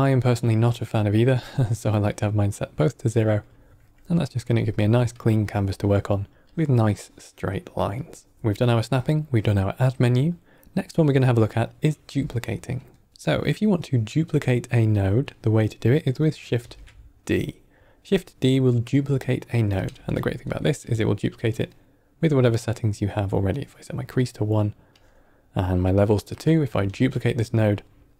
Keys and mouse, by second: 6.4-7.9 drag, 8.3 middle click, 12.3 ctrl+middle drag, 12.9 middle click, 13.7 click, 14.8 click, 16.5 shift+d, 19.7 click, 19.8 x, 20.7 click, 21.4 click, 22.4 click, 23.4 drag, 24.8 drag, 26.2 click, 26.7 shift+d.